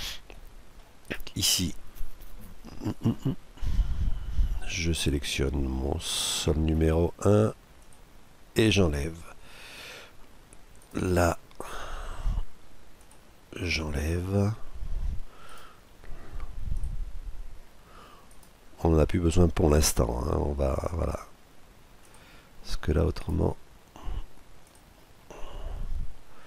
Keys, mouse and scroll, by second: 0.7-2.5 right drag, 4.5-7.6 middle drag, 7.6-9.1 drag, 10.5-12.8 right drag, 12.8-14.3 drag, 15.1-16.9 right drag, 16.5-18.2 drag, 18.0-21.8 right drag, 21.8-23.5 drag, 22.8-24.6 right drag, 24.4-26.1 drag, 25.0-26.4 middle drag.